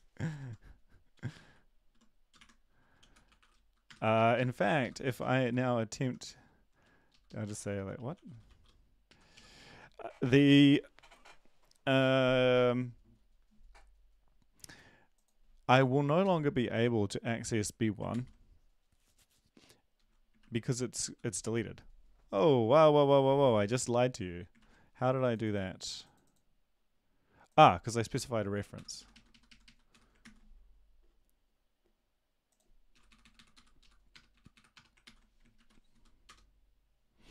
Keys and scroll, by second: 3.1-9.8 typing, 4.1 Left, 4.3 Left, 4.8 Left, 7.1 Left, 7.2 Left, 9.0 Right, 18.1 ctrl+s, 20.4 Up, 20.4 ctrl+`, 24.6 ctrl+`, 29.0 Delete, 29.0 Right, 29.3 Right, 29.5 Right, 29.6 Right, 29.9 Delete, 30.2 ctrl+s, 32.9 Delete, 33.1 Delete, 33.2 Delete, 33.5 Delete, 33.5 Up, 33.8 Left, 34.1 BackSpace, 34.3 Delete, 34.5 Delete, 35.0 ctrl+s, 35.5 ctrl+`, 35.9 Up, 36.3 Return.